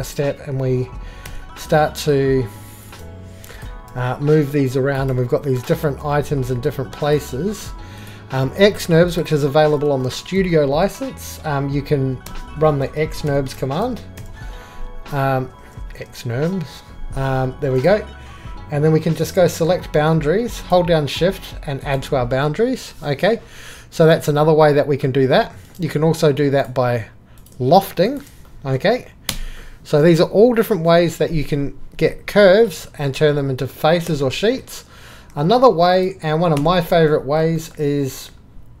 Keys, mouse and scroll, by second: 3.9 g, 4.6-5.0 drag, 5.0-5.6 drag, 6.0 g, 6.7-7.2 drag, 8.0 click, 12.3-14.7 typing, 16.0 BackSpace, 17.7 BackSpace, 18.5-19.2 drag, 19.3-20.6 drag, 22.4-24.8 middle drag, 25.4 Escape, 27.4 click, 29.3 click, 34.0 click, 34.1 Escape, 36.5 click.